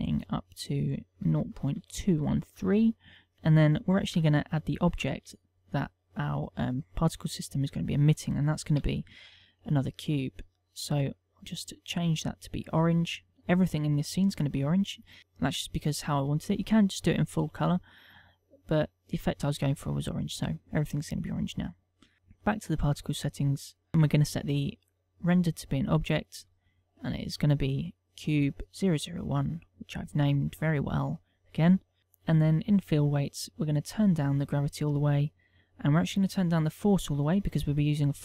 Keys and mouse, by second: 0.0 ctrl+click, 5.3 right click, 5.7 shift+a, 9.5 g, 10.3 click, 11.3 click, 12.0 click, 22.1 click, 23.5 middle click, 25.9 click, 26.6 click, 27.9 click, 29.3 click, 30.6 click, 33.3 click, 33.6 middle click, 34.6 click, 36.6 click.